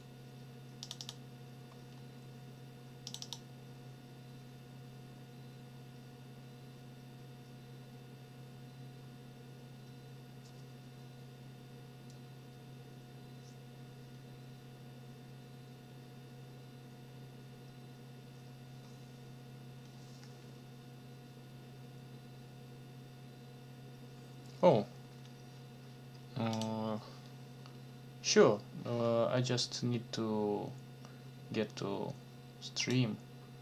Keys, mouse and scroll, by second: 0.8 click, 3.1 click, 26.5 click, 32.8 click.